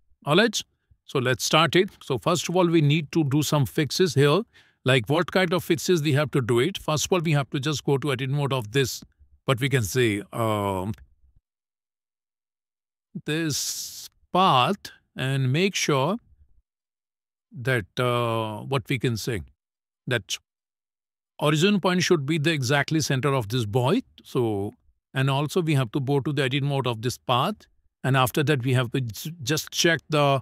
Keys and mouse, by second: 0.1 shift+middle click, 5.2 shift+middle click, 6.6 Tab, 12.1-14.1 drag, 15.5 Tab, 23.9 shift+middle click, 25.1 shift+middle click, 26.9 Tab, 27.6 a, 29.4-30.4 drag.